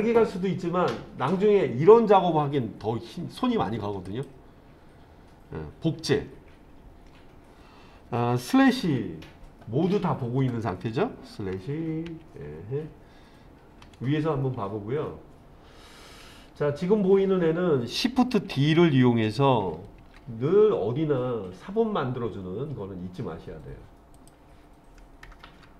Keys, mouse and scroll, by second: 4.1 click, 8.9 /, 11.6 /, 12.1 /, 13.9 KP_7, 16.0-16.9 scroll down 1, 20.0 shift+d, 24.2 click.